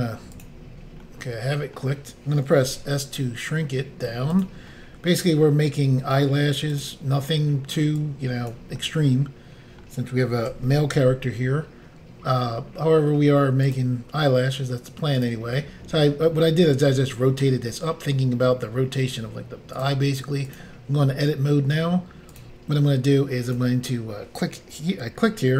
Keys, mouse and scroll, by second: 0.4 click, 0.5 click, 1.1 middle click, 2.7 s, 4.4 click, 4.5 click, 4.7 middle click, 6.8 click, 6.9 click, 8.0 click, 8.8 middle click, 10.5-11.0 typing, 13.7 click, 13.8 click, 15.2 click, 19.8 click, 19.9 click, 20.5 click, 20.6 click, 21.3 scroll up 1, 21.9 scroll up 1, 22.4 click, 23.5 click.